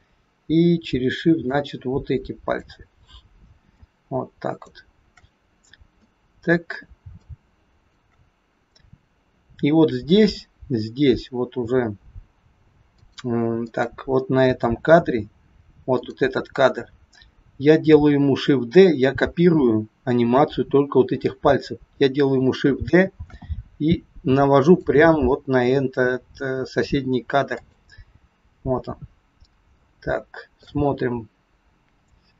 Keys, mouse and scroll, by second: 1.5 shift+click, 3.7 shift+click, 5.9 middle click, 7.2 shift+click, 13.0 click, 13.6 click, 15.8 click, 23.2 shift+d, 27.5 click, 29.1-29.7 scroll up 1, 29.7 shift+middle click, 31.0-31.6 scroll up 4, 31.6-32.2 scroll up 7.